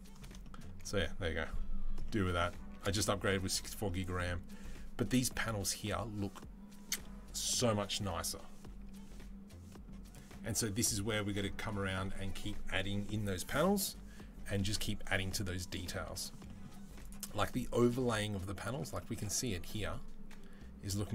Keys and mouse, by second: 16.8 click.